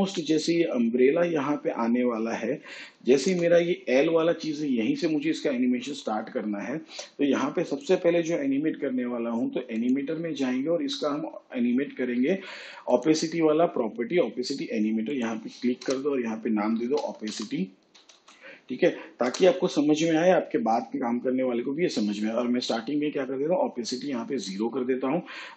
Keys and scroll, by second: 17.3 Return, 18.2 o, 18.5 p, 19.3 i, 19.7 y, 20.7 Return.